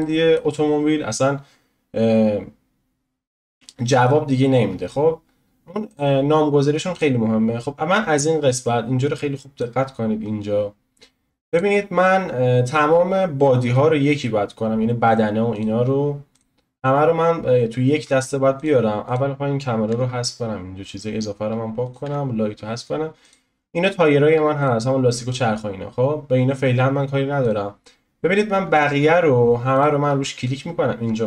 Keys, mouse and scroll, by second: 0.0-5.9 middle drag, 5.9-7.0 drag, 7.9-9.0 scroll down 1, 9.0 click, 9.8-10.2 scroll up 7, 11.5 click, 15.5-16.4 drag, 18.5 click, 19.9 Delete, 20.2-21.3 scroll down 1, 21.3-21.8 scroll down 1, 21.8 click, 22.1 Delete, 23.2 click, 24.6 shift+click, 27.4 click, 28.6-29.7 scroll up 1, 29.7 shift+click.